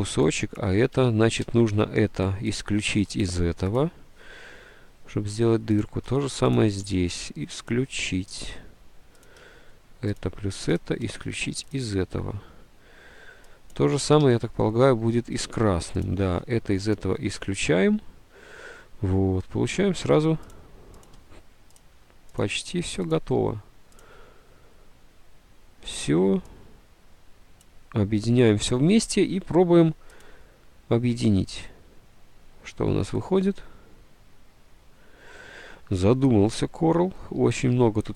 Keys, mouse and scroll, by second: 1.3 ctrl+z, 14.4 ctrl+z.